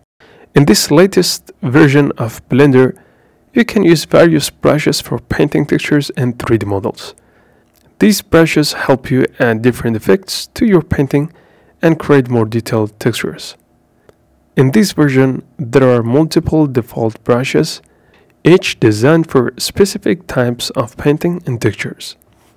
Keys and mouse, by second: 0.0-3.8 middle drag.